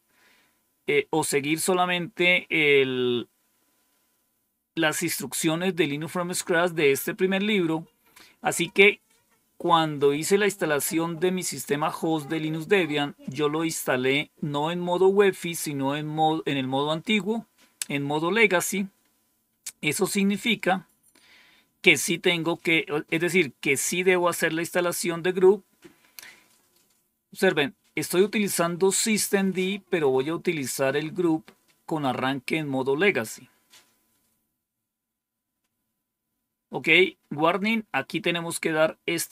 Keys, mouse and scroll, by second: 35.9-36.6 scroll down 1.